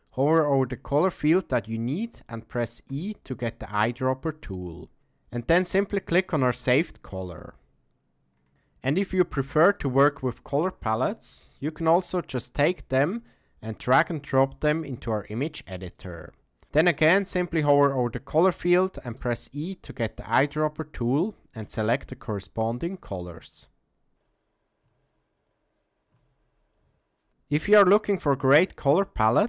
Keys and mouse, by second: 2.9 e, 8.5-10.2 middle drag, 19.2 e, 23.0 e, 24.8 e, 26.1 e.